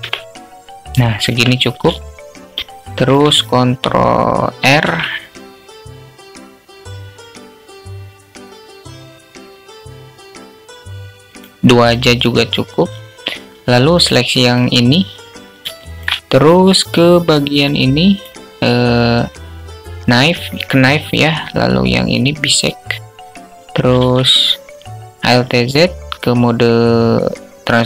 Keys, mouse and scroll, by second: 1.4 alt+shift+click, 4.0 ctrl+r, 13.4 click, 15.1 alt+shift+click, 17.3 click, 21.1 click, 23.2 alt+z.